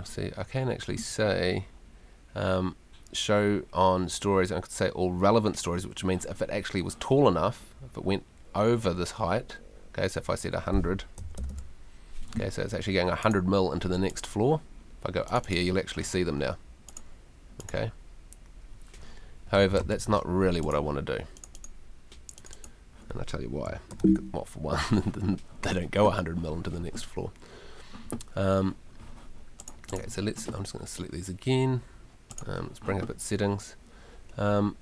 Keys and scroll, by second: 10.9-11.9 typing, 19.8 super+z, 23.9 super+t.